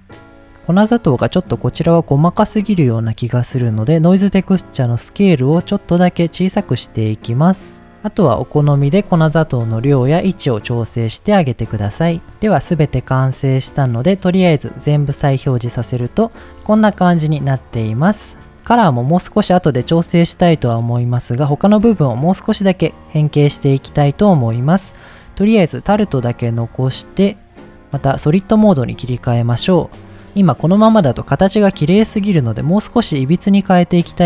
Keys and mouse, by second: 1.8 middle drag, 2.6 middle click, 4.7-7.0 drag, 9.2 middle click, 10.1 middle click, 10.9 middle click, 13.2 click, 13.8 click, 14.6 click, 15.4 middle click, 16.0 click, 16.4 middle click, 17.2-17.5 middle drag, 18.0 middle drag, 18.5-18.8 middle drag, 19.3-19.9 middle drag, 20.5-20.9 middle drag, 21.3 middle drag, 23.6 middle click, 25.7 click, 26.3 click, 26.6 click, 27.8 click, 28.7 shift+middle click, 29.7 click, 30.4 middle drag, 31.4 middle click.